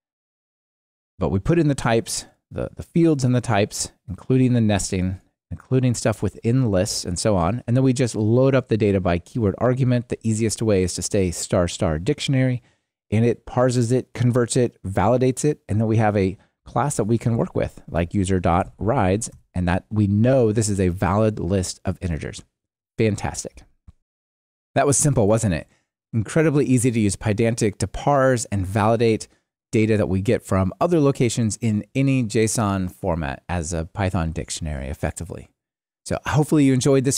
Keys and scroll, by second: 19.4 Return.